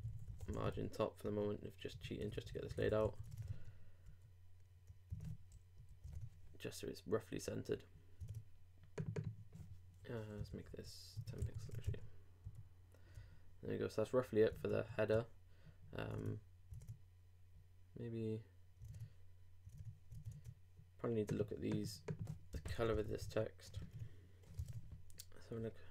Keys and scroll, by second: 3.0 super+;, 3.2 super+Tab, 3.5 super+r, 5.1 super+Tab, 5.8 super+Left, 6.0 super+Tab, 8.3 super+Tab, 11.4 super+i, 11.6 super+Tab, 11.9 super+r, 14.5 super+Tab, 16.1 super+Tab, 18.9 super+Tab, 23.7 alt+Tab, 23.8 alt+3, 24.6 alt+super+Tab, 25.1 super+Tab.